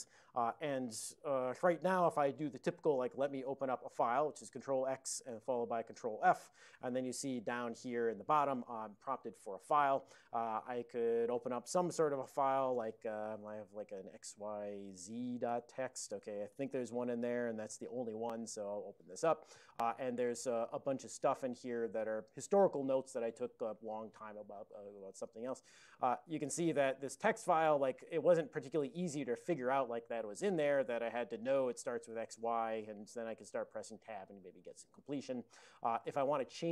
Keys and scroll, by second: 3.3 ctrl+x, 5.3 ctrl+f, 13.3-14.0 typing, 15.0 Tab, 15.5 Tab, 16.1 Tab, 16.5 Tab, 21.3 ctrl+v, 22.0 ctrl+v, 23.7 ctrl+v, 25.9 alt+<, 28.5 ctrl+x, 29.0 ctrl+f, 31.9-32.7 typing, 32.9 Tab, 33.5 Tab, 35.6 ctrl+g.